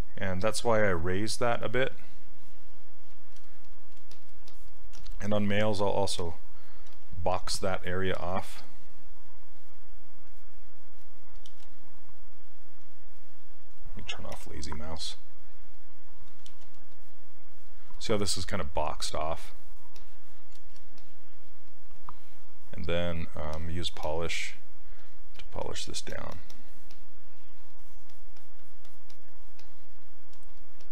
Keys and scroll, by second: 5.0 s, 6.9 s, 14.4 l, 16.6 ctrl+z.